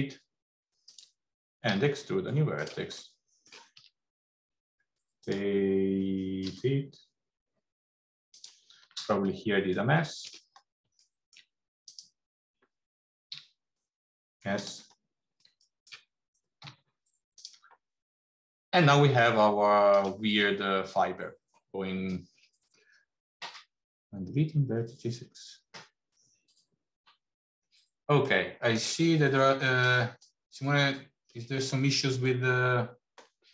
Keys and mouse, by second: 1.6 e, 3.1 middle click, 3.6 e, 9.9 shift+middle click, 11.1 shift+middle click, 13.2 g, 15.7 shift+middle click, 16.4 g, 18.8 middle click, 19.8 click, 28.2 middle click.